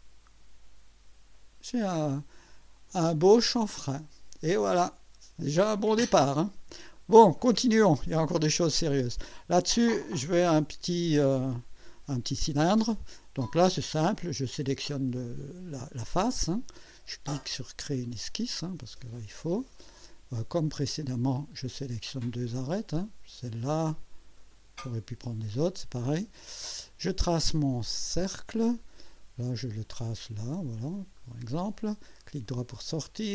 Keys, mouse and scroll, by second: 0.0 scroll up 1, 1.0 scroll up 1, 2.8 click, 3.7-6.7 drag, 6.9-7.7 drag, 8.3 scroll up 1, 11.1 scroll down 1, 13.8 click, 17.9 click, 18.9 scroll up 1, 19.4 right click, 20.9 click, 22.6 click, 24.5 click, 28.1 click, 30.1 click, 31.2 click, 32.2 right click.